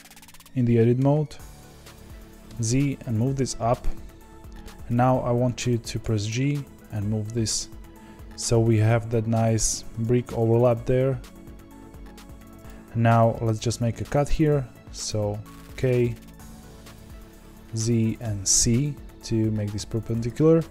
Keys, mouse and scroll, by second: 0.9 shift+d, 6.0 g, 10.3 g, 13.9 k.